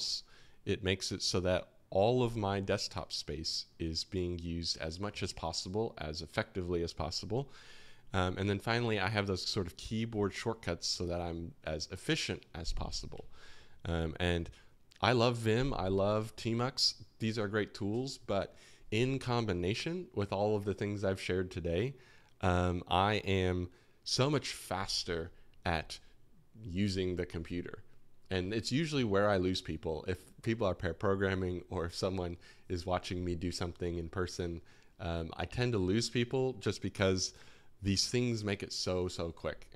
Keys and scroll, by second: 0.1 typing, 8.1-8.8 typing, 20.8-21.5 typing.